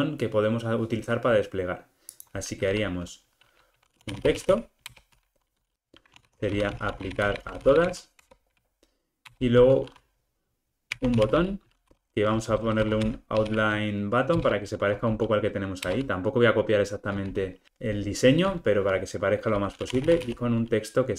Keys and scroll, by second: 5.0 Return, 14.5 Return.